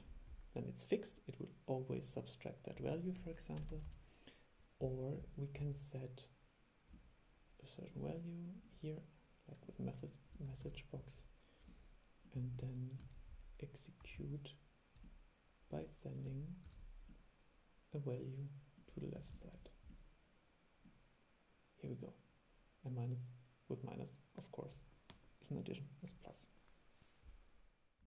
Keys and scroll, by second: 10.8 super+3, 13.2 super+3, 16.8 super+e.